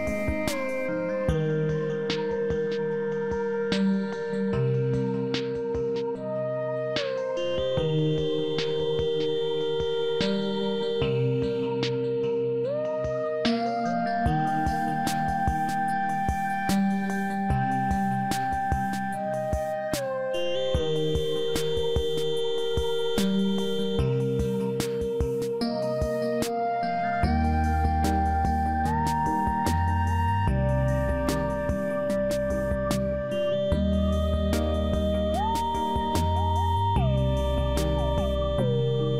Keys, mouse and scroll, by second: 2.3 click, 10.5 click, 14.8 click, 16.6 click, 20.9 click, 22.5 click, 25.1 click, 25.8 click, 37.0 click.